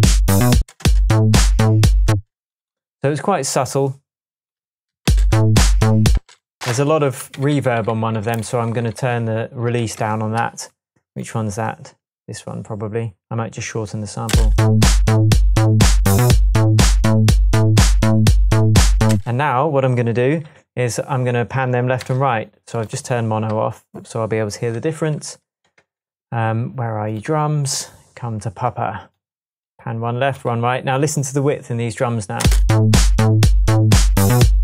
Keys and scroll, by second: 0.6 space, 2.1 space, 5.1-6.1 space, 7.2 space, 7.4 d, 8.1 d, 8.6 super+d, 9.8 shift+super+d, 10.0 Tab, 10.7 Tab, 14.3 space, 19.1 space, 22.0 alt+m, 24.8 alt+shift+Tab, 25.8 Tab, 32.4 space.